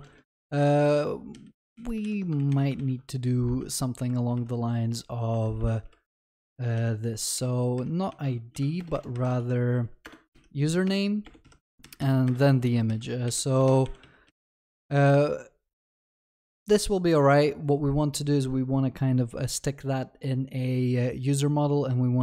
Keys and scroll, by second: 2.4 ctrl+x, 3.6 ctrl+d, 8.8 ctrl+BackSpace, 12.5 ctrl+s.